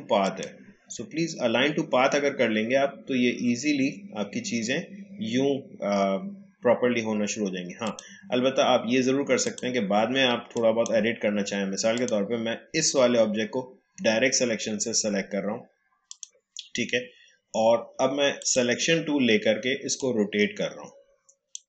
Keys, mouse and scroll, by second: 0.2 click, 7.8 click, 16.1-21.6 drag.